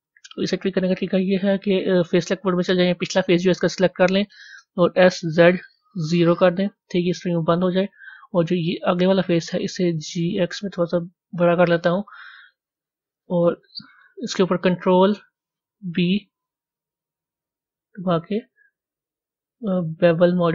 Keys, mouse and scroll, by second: 6.5-7.8 middle drag, 7.8-8.5 scroll up 2, 8.5 click.